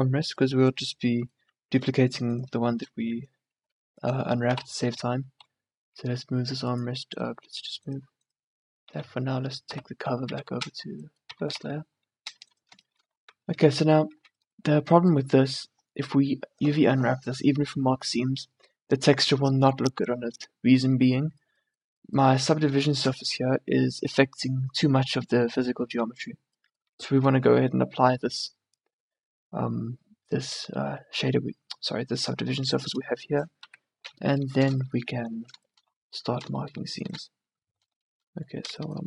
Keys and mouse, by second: 2.6-4.1 drag, 4.5 m, 7.7 click, 8.7 click, 8.9 2, 9.7 m, 11.4 1, 11.7 2, 13.3 middle click, 13.7 Tab, 14.3 a, 21.2-26.0 middle drag, 26.1 Tab, 27.3 a, 32.6 Tab, 33.8 KP_3, 37.5 middle click, 37.9 right click, 38.5-39.0 middle drag.